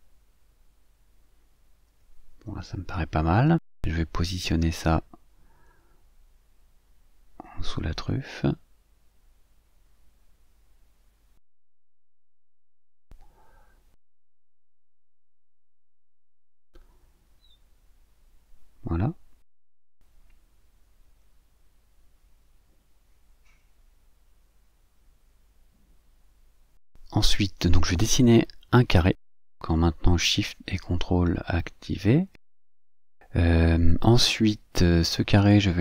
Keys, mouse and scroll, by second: 0.2-1.2 ctrl+scroll up 6, 2.5 click, 3.8-5.4 drag, 5.9-6.3 ctrl+scroll up 2, 7.7-10.2 ctrl+shift+drag, 10.4-11.9 ctrl+shift+drag, 12.4-14.5 ctrl+shift+drag, 14.9-18.9 ctrl+drag, 19.9-21.1 drag, 22.5-24.2 drag, 24.6 click, 25.1 ctrl+scroll down 2, 25.6 ctrl+scroll up 2, 27.1-28.1 scroll up 6, 28.5 click, 29.7-31.4 ctrl+shift+drag, 33.5 click, 35.7 click.